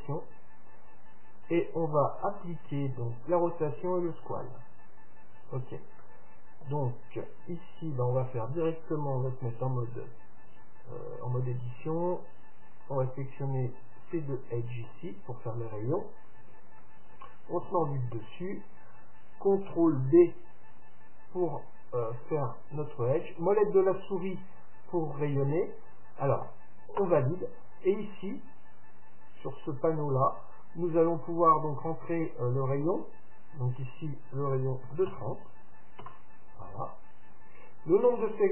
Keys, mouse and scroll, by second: 4.4-8.1 middle drag, 11.0 Tab, 12.8-14.8 drag, 13.8-15.5 right drag, 14.4-16.1 middle drag, 16.7-18.5 right drag, 17.7 KP_7, 20.0 ctrl+b, 29.8-31.8 drag, 32.0-33.8 drag.